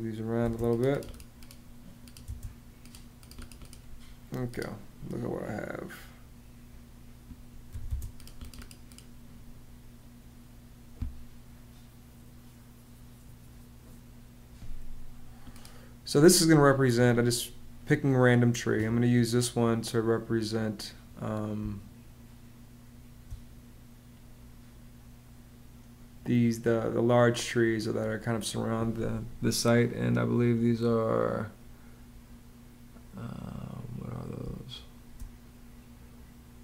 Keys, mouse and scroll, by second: 0.2 space, 2.0 space, 3.0 space, 7.4 m, 7.6 space, 21.3 space, 34.2 space.